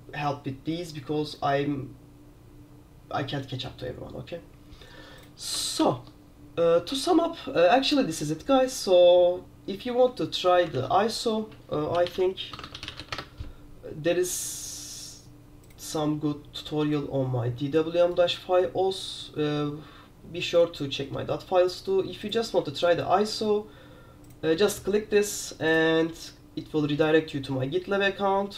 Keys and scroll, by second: 5.9 super+q, 10.8 super+w, 11.8-13.6 typing.